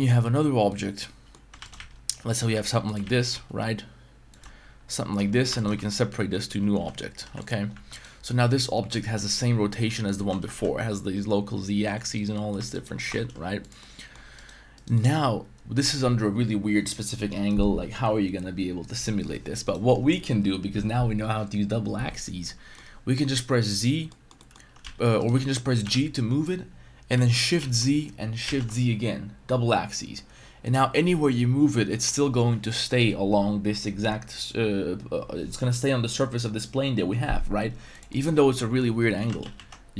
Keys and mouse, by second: 0.7 middle click, 1.6 shift+d, 1.6 shift+right click, 1.7 s, 2.3 click, 2.5 e, 2.9 click, 3.0 shift+s, 4.3 click, 4.6 Tab, 5.0 Tab, 5.2-7.3 typing, 5.6 alt+right click, 7.7 Tab, 7.9 right click, 9.7 middle click, 10.2 g, 10.4 z, 10.5 z, 12.1 right click, 12.3 shift+middle click, 12.7 shift+right click, 13.0 r, 13.1 z, 13.8-14.1 middle drag, 14.4 right click, 14.7 right click, 15.0-15.8 middle drag, 19.7 right click, 22.5-22.8 middle drag, 23.7-24.1 drag, 24.1 middle click, 24.4 middle click, 24.8 z, 25.2 right click, 25.3 z, 25.8 g, 27.6 shift+z, 28.4 shift+z, 38.1-38.8 middle drag, 39.2 g, 39.4 shift+z, 39.5 shift+z.